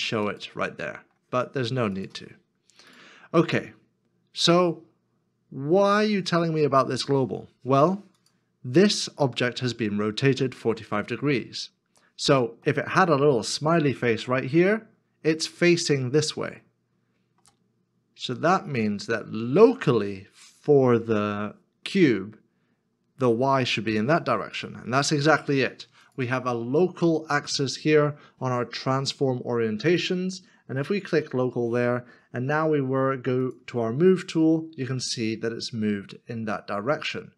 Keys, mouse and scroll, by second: 3.5 ctrl+z, 3.5 middle click, 12.6 middle click, 16.6 middle click, 31.3 middle click.